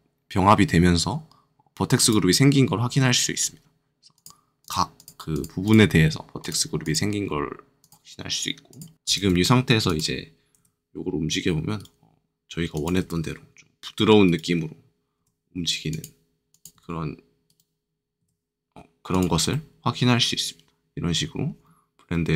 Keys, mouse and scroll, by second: 1.9-3.3 drag, 3.3-4.1 scroll up 3, 4.1 click, 4.6 click, 5.9-6.4 scroll down 2, 6.4 click, 6.8 click, 7.2-7.7 scroll up 2, 7.7 click, 8.6 click, 9.1 ctrl+Tab, 9.8 click, 10.5 r, 11.7 right click, 12.7 click, 12.9 r, 14.2 right click, 15.1 r, 15.8 click, 16.5 click, 16.7 r, 17.4 right click, 18.2 r, 19.1 click, 19.4 middle click.